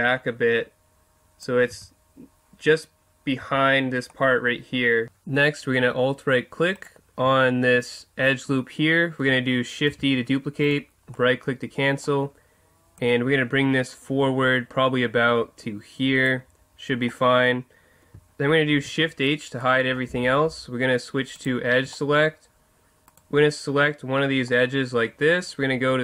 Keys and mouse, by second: 1.7 z, 3.4 z, 4.2 middle click, 6.7 right click, 9.9 shift+d, 11.1 click, 13.0-14.8 drag, 18.8 shift+h, 21.4-23.0 drag, 21.9-23.3 middle drag, 23.1 right click, 23.3-24.9 drag.